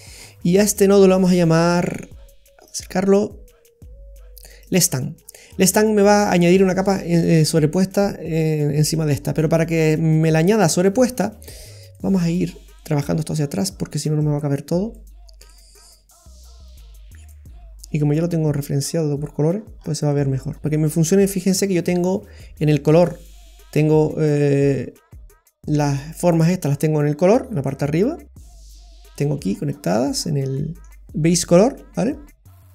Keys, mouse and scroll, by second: 0.0-0.6 scroll up 10, 0.7 middle click, 1.9-2.4 scroll up 5, 2.6 click, 2.6 scroll up 3, 5.2-5.7 scroll down 6, 9.1-9.9 scroll down 6, 9.9 middle click, 11.5 click, 12.2-12.7 scroll down 6, 12.7 middle click, 14.2 click, 15.2-16.3 scroll down 3, 16.7 click, 19.5-20.7 scroll up 7, 20.1 middle click, 20.7 middle click, 20.7-21.0 scroll down 4, 21.7-22.2 scroll down 4, 28.9-29.6 scroll up 5, 29.2 middle click, 29.7-30.6 scroll up 8, 30.6 middle click, 32.1-32.7 scroll down 10.